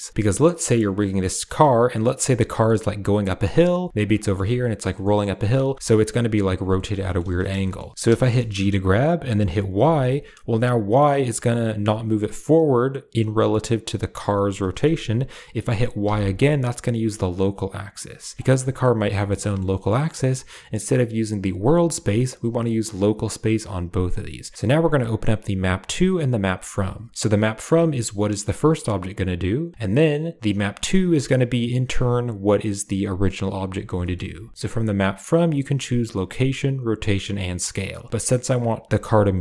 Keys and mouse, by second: 0.2 click, 2.0 r, 3.7 g, 4.1 shift+middle click, 4.8 middle drag, 5.2 middle drag, 5.5 r, 6.6 middle drag, 6.9 shift+middle click, 7.5 shift+middle click, 7.8 middle click, 8.0 shift+middle click, 8.4 g, 18.3 shift+middle click, 18.4 ctrl+z, 18.8 click, 19.0 shift+middle drag, 19.2 click, 19.6 shift+drag, 21.6-22.7 drag, 23.4-24.5 drag, 25.4 click, 26.3 click, 27.1 g, 29.9 click, 31.7 g, 33.5 shift+click, 33.9 shift+click, 35.9 click, 36.5 click, 37.1 click, 38.1 middle click, 38.4 drag, 38.8 g.